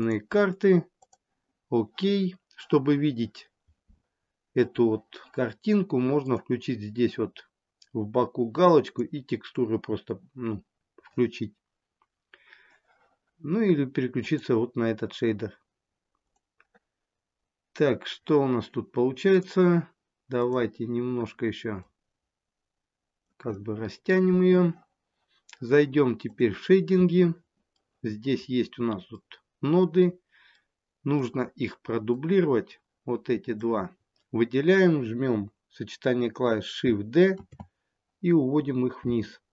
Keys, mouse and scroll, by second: 4.2-6.1 scroll up 2, 6.1 click, 14.3 click, 16.3 click, 17.1-19.1 scroll up 1, 19.1-20.2 scroll up 1, 20.2 click, 21.6 click.